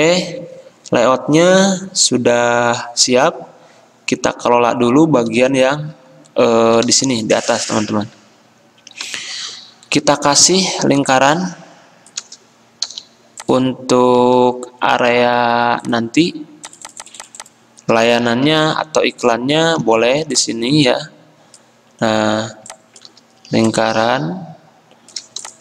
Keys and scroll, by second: 7.1 l, 13.9 i, 14.4 x, 18.7 c, 20.1 v.